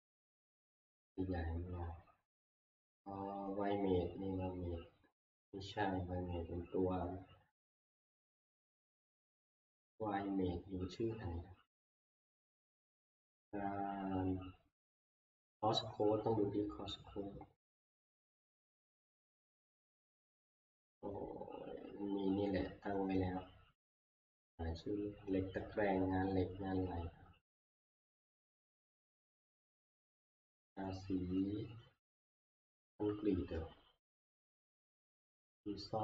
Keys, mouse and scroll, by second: 0.9 click, 2.0 click, 2.0 scroll, 4.5 scroll, 6.5-6.9 scroll, 7.6 scroll, 8.3 scroll, 12.5 scroll, 13.1 scroll, 13.9-14.7 scroll, 14.7-17.1 scroll, 17.1 scroll, 18.9 scroll, 21.8-22.1 scroll, 22.5 scroll, 23.5 scroll, 24.3-25.2 scroll, 25.2 scroll, 27.0-27.5 scroll, 31.7 scroll, 32.3 scroll, 34.3 scroll, 35.3 scroll.